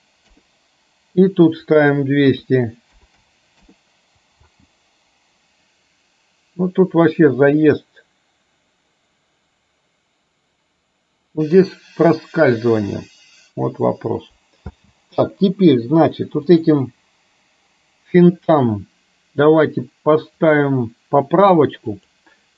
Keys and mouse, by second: 1.9-3.6 drag, 3.1 KP_0, 4.5 space, 14.7 space, 20.5-22.1 drag.